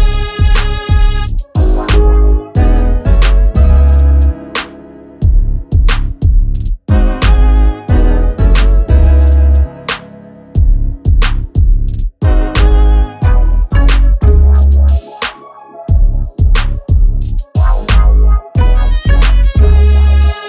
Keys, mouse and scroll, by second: 9.4 click, 13.2 click.